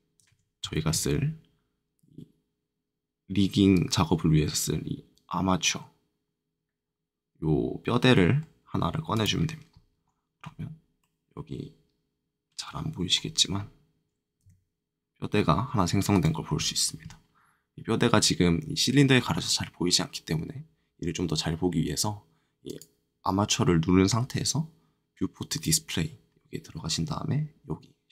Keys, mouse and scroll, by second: 0.6 shift+a, 9.1 click, 10.0 middle click, 10.9-12.3 scroll up 1, 13.1 scroll down 2, 14.4 g, 16.1 click, 22.6 click, 25.4 click, 26.2-28.1 scroll down 1.